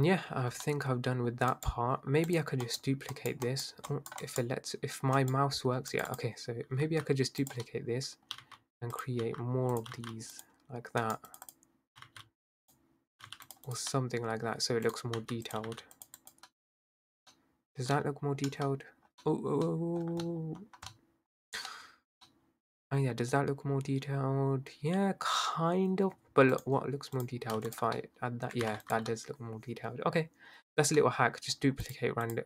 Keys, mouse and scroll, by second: 0.3-0.6 scroll up 5, 0.6-1.3 middle drag, 1.3-2.3 scroll down 2, 2.3 click, 4.0-6.2 right drag, 6.8 s, 7.8 middle click, 8.4 g, 9.8 s, 9.9 g, 11.0 right click, 11.4-12.7 drag, 13.2 g, 13.7 drag, 13.9 middle click, 14.9 drag, 15.2 s, 15.6 g, 16.2 click, 17.1 scroll down 3, 17.7 scroll up 5, 17.9-18.3 scroll down 1, 18.3-19.0 scroll up 2, 19.0 scroll down 1, 19.3-20.0 scroll up 5, 20.0 scroll down 1, 20.2-21.3 scroll up 4, 21.3-21.7 scroll down 4, 21.7-22.2 scroll up 3, 22.1 middle click, 22.2-25.3 middle drag, 26.6 click, 27.2 shift+click, 27.6 x, 28.0-28.7 middle drag, 28.7 ctrl+z, 28.9 click, 29.1-30.7 middle drag, 30.7-31.0 scroll up 1, 31.0-31.5 middle drag, 31.5-31.9 scroll up 1, 31.9 click, 32.3 click.